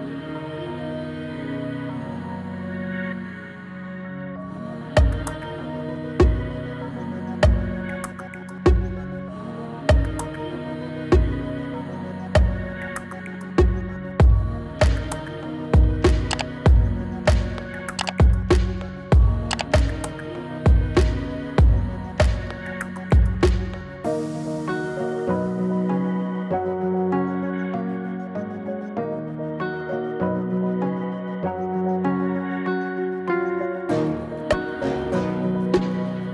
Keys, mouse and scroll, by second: 1.7 click, 7.0-12.9 drag, 16.0 click, 16.1-16.7 drag, 28.2-36.3 drag, 29.0-30.9 drag, 32.8-34.1 drag, 35.4-36.3 drag.